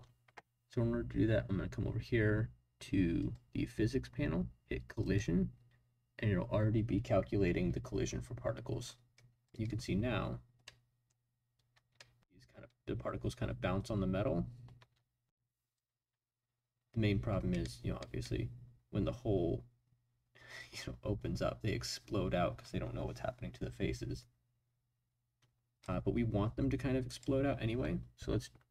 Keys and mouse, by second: 3.1 click, 5.0 click, 8.8-9.4 drag, 9.7 space, 10.6-11.1 drag, 11.8 space, 11.9 drag, 12.7 space, 14.8 space, 15.7-25.8 drag, 27.1 click.